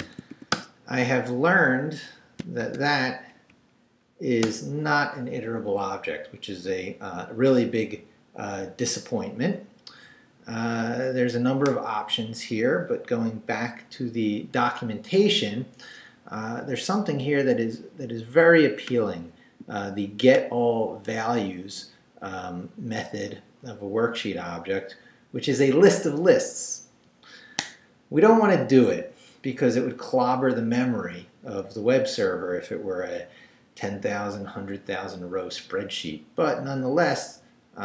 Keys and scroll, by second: 0.0 shift+;, 0.3 shift+w, 0.5 Return, 2.6 shift+;, 3.1 shift+Up, 4.4 Return.